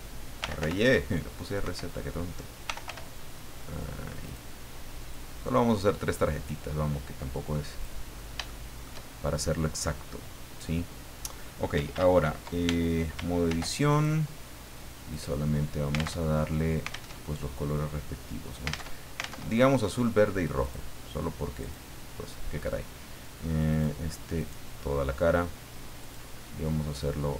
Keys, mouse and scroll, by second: 0.2-1.1 typing, 1.6 Escape, 2.4-3.3 typing, 4.2 click, 5.1 click, 6.4-8.0 drag, 8.1 scroll up 1, 8.4 shift+middle click, 12.6 ctrl+Tab, 13.5 ctrl+r, 13.9 ctrl+click, 15.1 click, 16.2 alt+Tab, 17.1 alt+Tab, 18.9 alt+Tab, 20.6 click, 21.6 click, 23.7 click, 24.4 right click, 26.0 click, 27.0-27.3 drag.